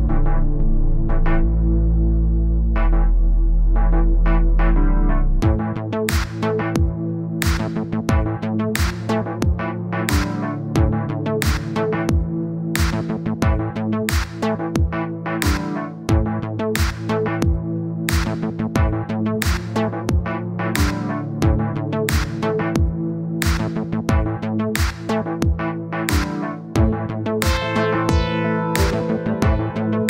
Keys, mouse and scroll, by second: 0.5 click, 1.0 KP_0, 2.0 click, 3.7-4.9 drag, 5.2-5.8 scroll down 10, 5.8-7.0 drag, 8.0-9.2 middle drag, 9.7-10.2 scroll up 1, 10.2 middle click, 11.2 click, 11.9-13.1 scroll up 22, 13.1 click, 13.2 click, 13.4 click, 14.1-18.4 drag, 18.4 middle click, 19.0-21.8 drag, 21.8 middle click, 22.2-24.2 drag, 25.0 scroll down 1, 25.1 middle click, 25.7 click, 26.2 middle click, 26.4 scroll down 1, 26.6 click, 27.5-28.0 scroll up 3, 28.0-29.1 drag, 29.1 scroll down 3, 29.2 middle click, 29.6-30.0 drag.